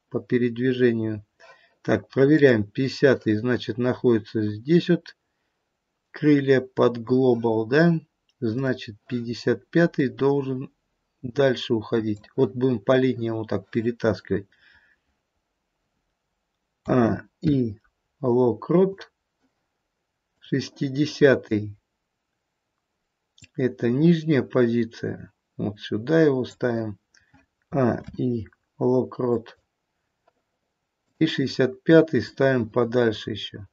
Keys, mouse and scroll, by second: 2.4 click, 8.6 click, 9.9 click, 16.8 a, 17.4 i, 20.3 click, 27.6 a, 28.0 i, 31.1 click, 32.2 click.